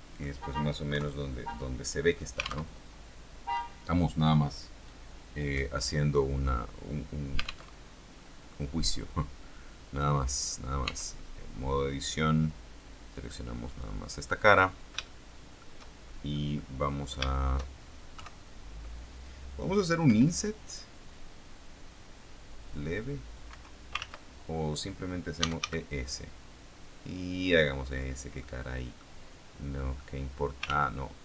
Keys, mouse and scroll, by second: 0.8 KP_3, 2.5 alt+Tab, 7.6 alt+Tab, 8.0-8.5 scroll up 2, 8.5-9.3 scroll down 2, 10.7 Tab, 13.1 click, 13.5 right click, 14.9 shift+middle click, 16.2 middle click, 17.2 shift+middle click, 18.1 KP_3, 19.9 i, 23.4 Escape, 23.9 ctrl+z, 25.0-26.0 typing, 27.8 click, 28.3 middle click, 29.9 middle click, 30.6 ctrl+z.